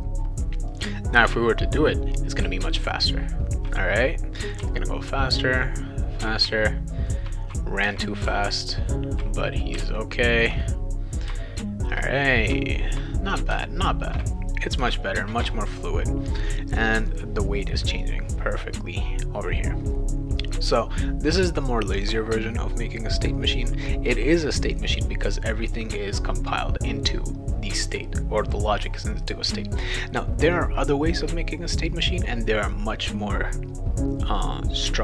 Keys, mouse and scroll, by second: 0.7 click, 2.4 w, 4.6 s, 6.4 shift+w, 8.2 shift+w, 9.7 shift+w, 11.3 shift+w, 12.5 shift+w, 13.5 shift+w, 16.5 click, 17.9 click.